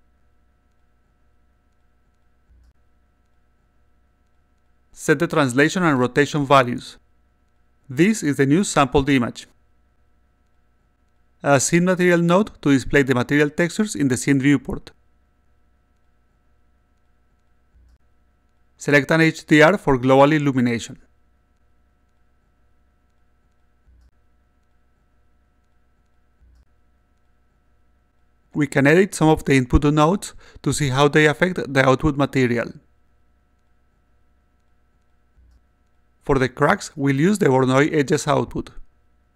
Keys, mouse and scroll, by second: 0.3 click, 1.7 click, 3.3 click, 4.6 click, 4.8 2, 5.0 0, 5.8 2, 7.2 3, 7.5 6, 7.6 0, 10.7 click, 12.2-13.2 drag, 14.4 click, 15.9 click, 17.6 click, 18.6 click, 19.7 click, 20.1 click, 21.1 click, 21.3 click, 22.9 click, 23.3-24.4 drag, 25.2 click, 26.1 alt+click, 27.3 alt+middle click, 29.2 click, 30.2 click, 31.0 click, 33.1 click, 34.2 click, 35.0 click, 36.4 click, 38.4 click.